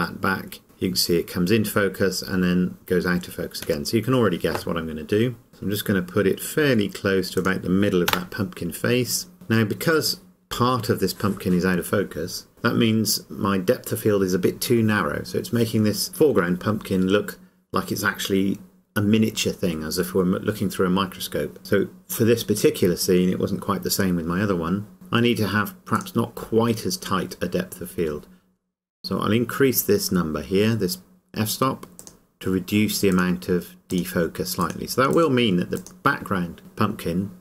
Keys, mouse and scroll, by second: 3.6 y, 3.9 Escape, 5.5 g, 7.5 click, 24.9 click, 32.0 click.